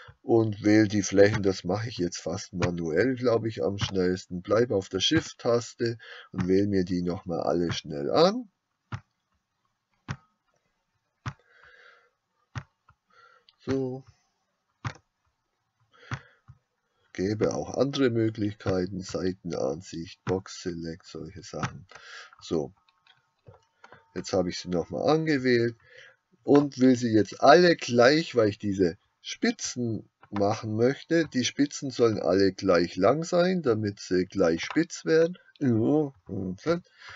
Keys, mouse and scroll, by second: 1.7 shift+click, 23.9-34.7 middle drag, 34.7 click, 36.7 ctrl+z.